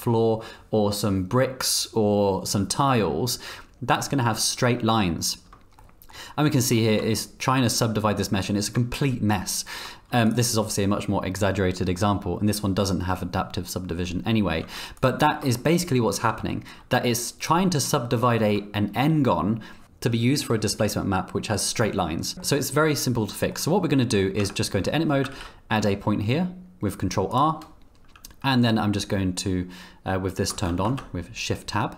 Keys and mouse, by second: 3.7 z, 5.8 shift+middle click, 6.8 shift+middle click, 14.6 z, 15.5 middle click, 18.3 shift+middle click, 22.3 click, 22.3 z, 23.5 click, 24.4 Tab, 25.3 ctrl+r, 30.5 shift+Tab.